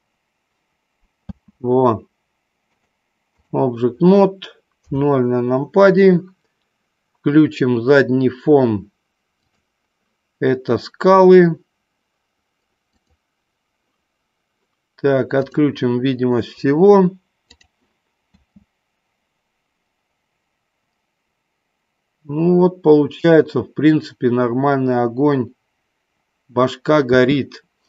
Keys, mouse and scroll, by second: 1.4 space, 2.6 click, 4.7 KP_0, 9.6 click, 13.1 click, 17.5 click, 18.6 space, 27.4 space.